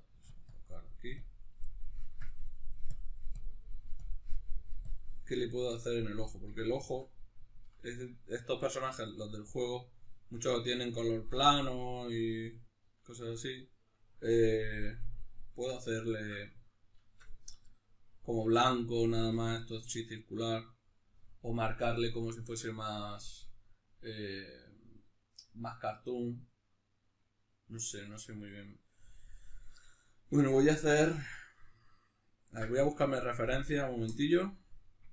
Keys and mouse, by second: 0.1 f, 0.6-1.6 drag, 1.6 middle click, 2.2-5.2 drag, 5.2 middle click, 5.7 click, 6.3-35.1 ctrl+middle drag.